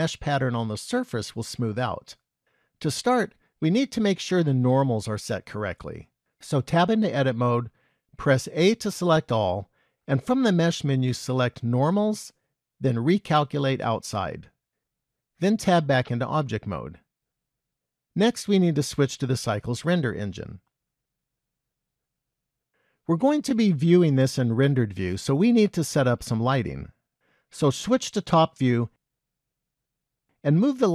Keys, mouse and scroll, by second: 6.8 Tab, 8.6 a, 10.2 click, 15.7 Tab, 18.8 click, 19.8 click, 22.1 click, 28.2 KP_7, 29.0-30.8 scroll down 5, 30.8 click.